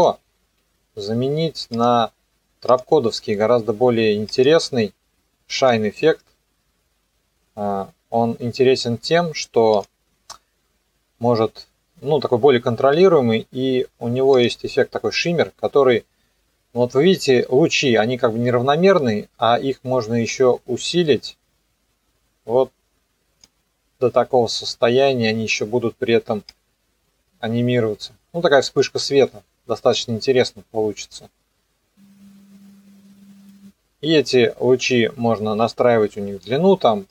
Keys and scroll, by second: 29.1 ctrl+z.